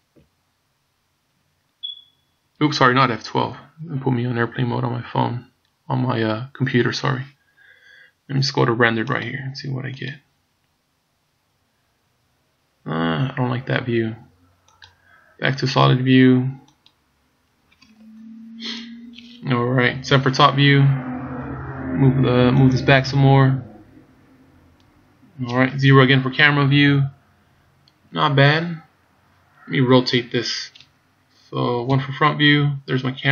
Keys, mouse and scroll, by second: 9.1 click, 15.5 click, 20.1 KP_7, 21.3-22.7 scroll down 1, 22.7 click, 25.8 KP_0, 31.9 KP_1.